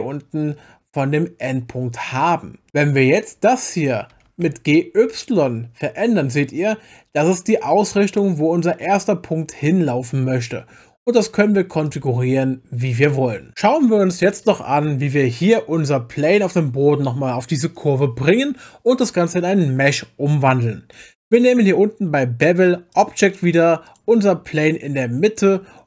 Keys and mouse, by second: 4.1 g, 4.5 y, 11.9 click, 22.9 click, 23.9 click, 25.4 click.